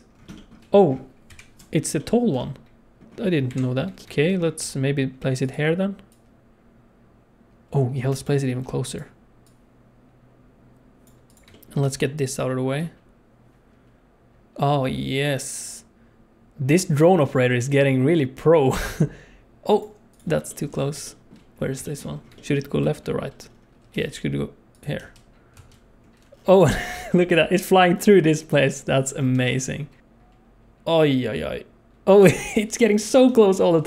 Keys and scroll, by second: 1.2 KP_7, 3.4 KP_7, 4.5 g, 8.5 g, 11.8 g, 23.9 g, 24.9 space, 26.0 space, 29.4 space.